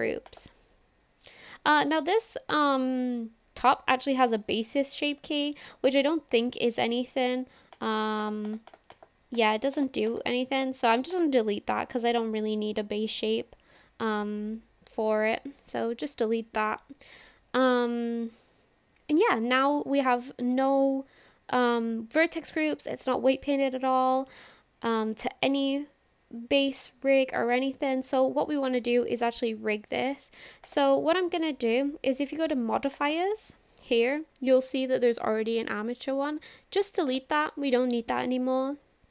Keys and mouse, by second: 7.8 click, 8.3 click, 8.7 click, 8.9 click, 9.4 click, 9.8 click, 10.1 click, 10.6 click, 11.2-14.4 drag, 28.7 click, 30.7 click, 37.1 click.